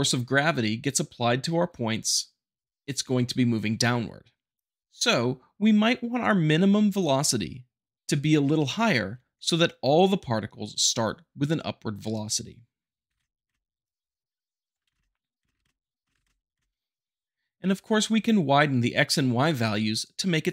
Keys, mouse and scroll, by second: 12.1 shift+click, 13.1 shift+Left, 13.2 space, 15.0-16.2 typing, 15.5 shift+Left, 16.1 shift+Left.